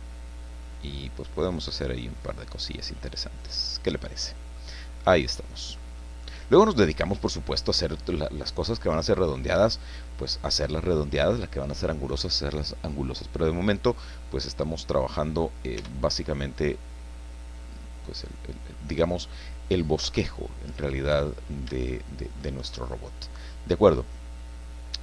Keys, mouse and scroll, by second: 1.4-4.7 drag, 5.3 scroll down 2, 5.3 click, 6.2 scroll up 2, 6.6 scroll down 2, 6.8 scroll up 2, 7.1 scroll down 2, 8.2-9.5 drag, 9.6-10.0 scroll up 2, 10.6 scroll up 2, 10.7 click, 13.9-14.2 scroll down 2, 14.3 click, 15.8 Tab, 16.5 scroll down 2, 16.6-18.9 drag, 20.0 KP_1, 20.7-21.1 scroll up 2, 21.4 scroll down 2, 21.8 shift+click.